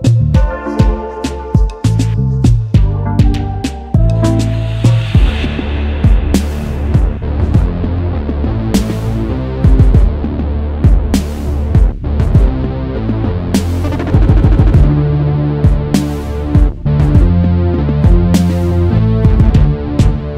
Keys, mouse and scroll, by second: 2.4 i, 4.8-5.7 alt+scroll up 1, 8.0 double click, 9.3 Return, 12.2 alt+shift+click, 13.6 right click, 14.8 double click, 17.9 shift+click.